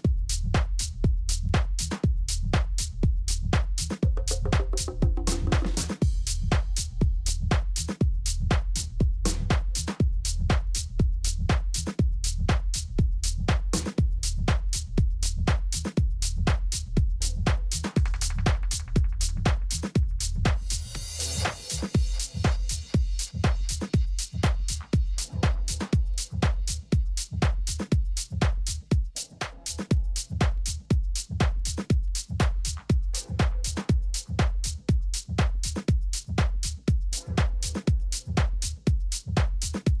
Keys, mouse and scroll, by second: 3.1 KP_3, 3.7 z, 5.9-7.5 middle drag, 9.9 a, 10.8 a, 12.0 Tab, 13.1 a, 13.4 a, 13.9 a, 14.7-16.6 right drag, 15.7 middle click, 16.6 middle click, 19.0 g, 22.7 s, 27.5-29.2 drag, 29.2-31.2 middle drag, 30.2 KP_1, 31.2 z, 31.7 middle click, 34.0 middle click, 35.1 KP_3, 35.9 middle click, 36.5 z, 38.6 middle click, 39.7-40.0 middle drag.